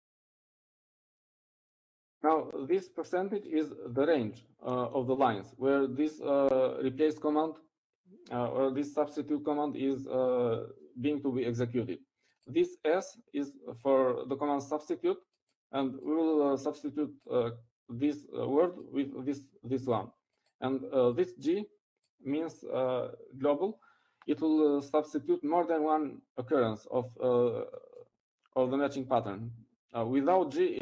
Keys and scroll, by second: 0.0-3.6 typing.